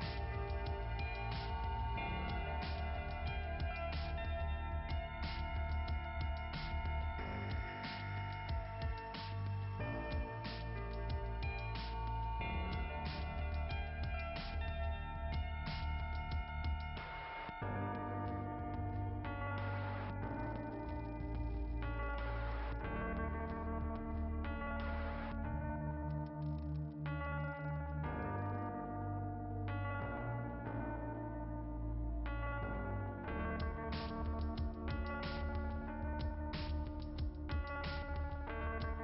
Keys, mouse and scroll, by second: 3.8 click, 4.9 click, 5.7 click, 6.9 click, 7.2 click, 9.0 click, 11.1 click, 11.2 click, 11.5 click, 11.8 click, 16.5 click, 16.8 right click, 17.0 double right click, 19.3 click, 20.3 right click, 20.5 right click, 22.2 click, 25.1 click, 25.3 click.